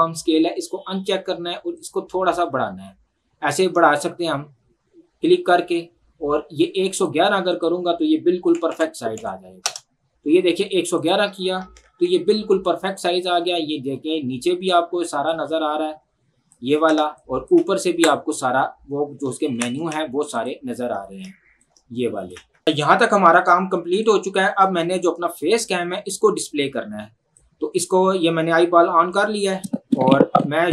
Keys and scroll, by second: 8.5 KP_1, 9.7 Return, 11.8 ctrl+1, 17.9 ctrl+Escape, 19.5 ctrl+1, 22.7 ctrl+1.